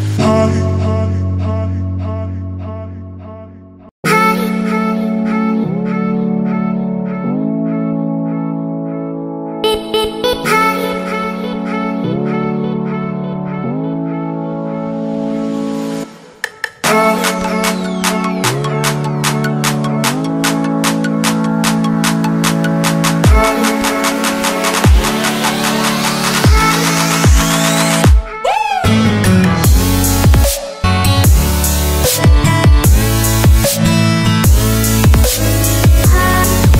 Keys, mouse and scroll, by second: 5.8 click, 9.5 click, 10.8 Return, 11.2 click, 16.0 ctrl+t, 16.5 click, 18.6 click, 19.3 t, 19.8 click, 21.0 Return, 23.0 t, 23.2 click, 26.1 Return, 27.6 click.